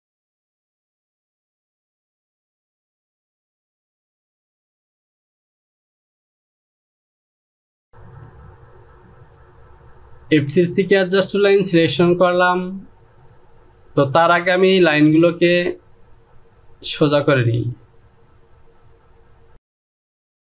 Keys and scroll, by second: 1.3 ctrl+z.